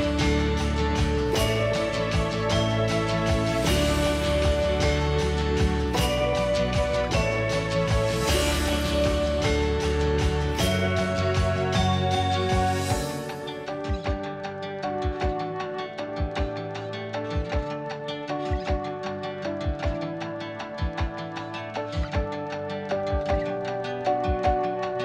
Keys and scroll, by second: 2.2 ctrl+h, 3.8-4.6 typing, 4.9 Return, 5.5 Escape, 5.7 p, 6.1 Escape, 6.5 h, 7.0 m, 8.2 1, 8.4 Return, 8.8 Escape, 13.4 1, 14.6 2, 15.1 1, 16.7-18.2 typing.